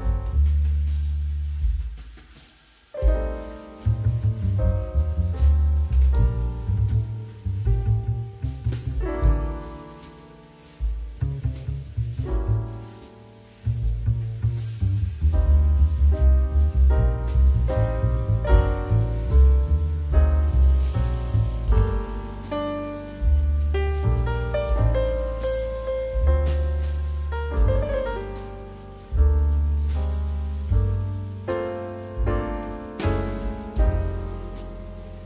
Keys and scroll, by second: 0.4 space, 2.4 space, 6.6 space, 8.3 space, 9.1 space, 11.4 space, 12.6 KP_5, 13.6 space, 16.2 ctrl+d, 18.9 space, 20.7 space, 28.5 2, 32.5 space, 34.8 space.